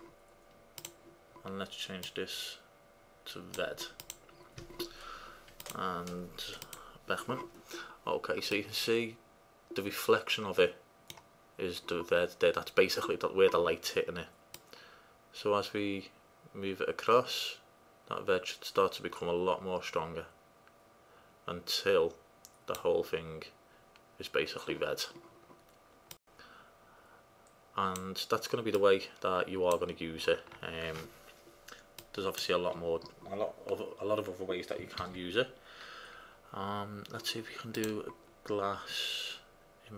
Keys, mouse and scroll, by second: 0.0-3.2 drag, 5.8-7.6 drag, 8.8-11.7 middle drag, 14.7-16.4 drag, 26.4-28.1 drag, 28.9-31.0 drag, 32.1-33.1 drag, 33.6-34.0 drag, 35.1 shift+a.